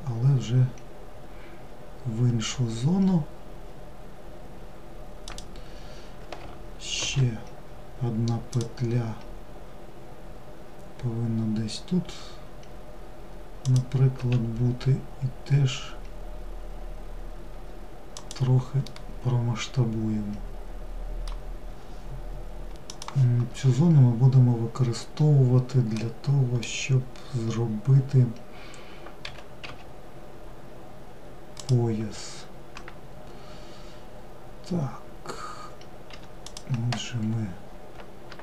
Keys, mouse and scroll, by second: 18.0-21.1 middle drag, 25.0-28.1 middle drag, 35.5 click, 37.6 shift+click.